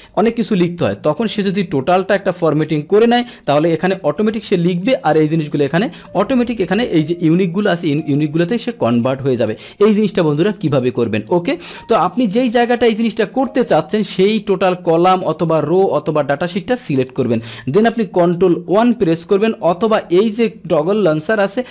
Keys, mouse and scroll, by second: 3.6 click, 4.8 click, 5.5 click, 7.0 click, 10.7 click, 11.7 click, 12.4 click, 13.5 click, 15.5 click, 17.0 click, 18.8 ctrl+1.